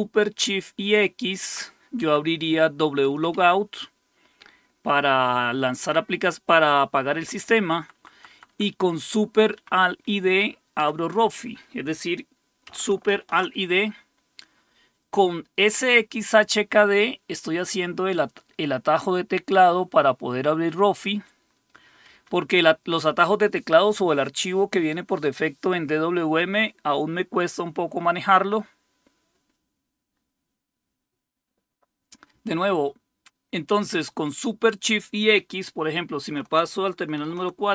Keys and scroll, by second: 0.3 Right, 1.0 Right, 1.1 Right, 2.0 Down, 2.9 Left, 3.2 Left, 3.3 Left, 7.4 Down, 7.7 Down, 7.8 Down, 8.0 Down, 8.1 Down, 8.3 Down, 8.5 Down, 8.7 Down, 8.9 Down, 9.5 Up, 10.8 Down, 13.1 alt+super+d, 22.2 Escape, 37.3 super+4.